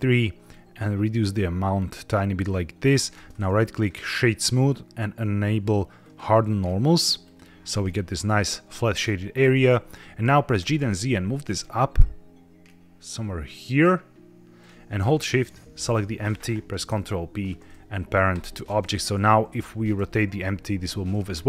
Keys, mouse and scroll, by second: 0.4-2.9 shift+drag, 3.2 right click, 5.9 click, 7.1 click, 8.8-9.3 scroll down 3, 9.3-9.8 middle drag, 10.5 g, 10.7 z, 14.5 click, 15.3 shift+click, 16.8 ctrl+p, 19.1 click, 19.9 r, 20.7 Escape.